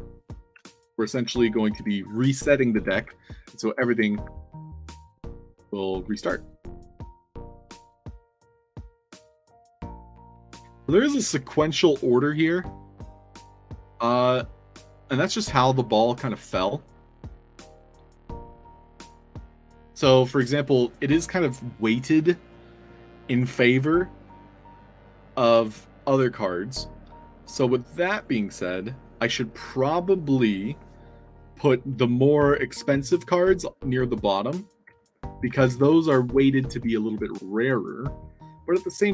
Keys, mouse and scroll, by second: 0.2 a, 2.8-5.9 typing, 7.3 e, 31.5 w, 32.4 w, 34.4 d, 34.8 s, 35.4 w, 35.6 a.